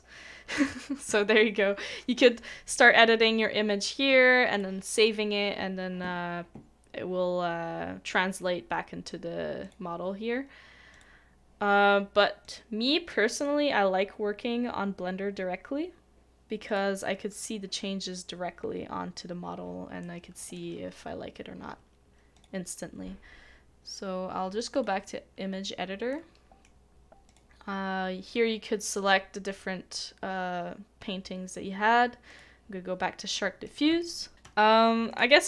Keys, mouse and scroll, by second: 13.1 middle click, 20.0 middle click, 26.1 middle click, 33.3 middle click, 34.0 shift+middle click.